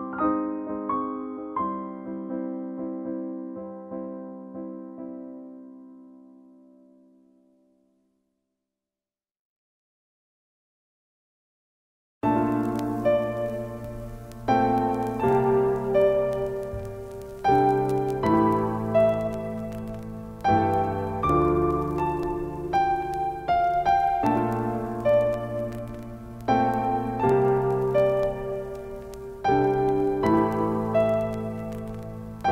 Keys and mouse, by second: 6.8 click, 14.8 click, 14.8 typing, 18.9 click, 22.9 click, 25.4 click, 28.6 0, 30.2 click.